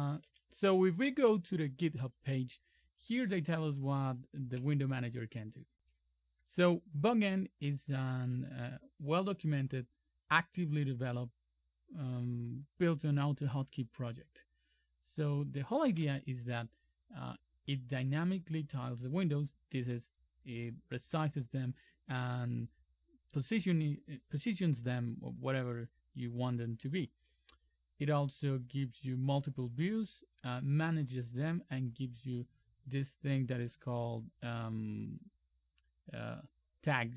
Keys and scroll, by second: 0.3 super+3.